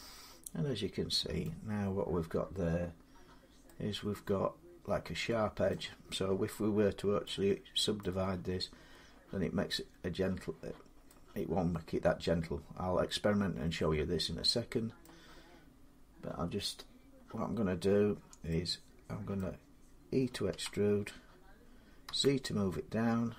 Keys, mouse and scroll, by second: 1.2 middle click, 1.2-1.6 scroll up 2, 1.6 scroll down 1, 4.9 scroll, 5.4-6.2 scroll up 1, 7.8 middle click, 14.8-23.3 middle drag, 20.3 e, 21.8 z.